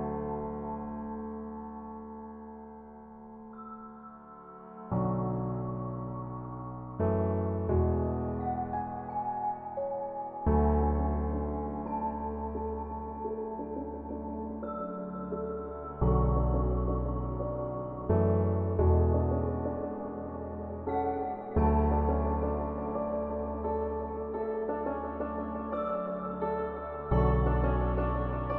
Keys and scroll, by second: 0.8 space, 3.3 space, 4.3 space, 8.5 space, 9.8 space.